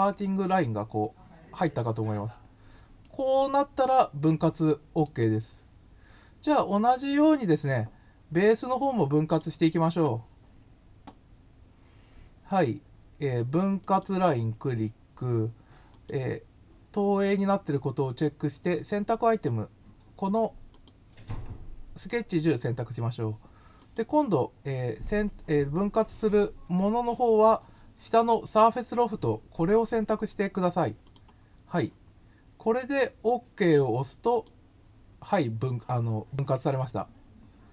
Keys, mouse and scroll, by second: 2.3 scroll up 1, 3.0-5.0 middle drag, 5.5-5.9 scroll down 2, 6.4 scroll up 2, 7.0 scroll up 1, 9.2 click, 13.7 click, 15.9 click, 20.6 click, 23.7 click, 31.0 click, 34.3 click, 36.2 scroll up 2, 36.8 middle click.